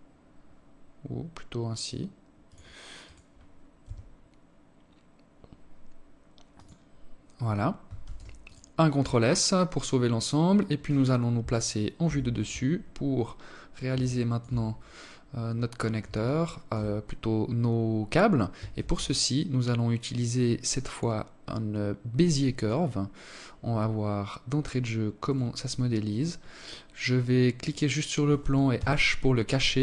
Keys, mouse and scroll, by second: 1.8 right click, 2.6 g, 6.8 ctrl+s, 10.8 KP_7, 12.1 scroll down 1, 12.8 alt+shift+click, 13.3-13.6 scroll down 4, 13.7 scroll up 1, 14.2 scroll up 1, 14.9 alt+shift+click, 17.4 shift+a, 23.9 right click, 26.3 right click, 27.4 h, 28.6 right click.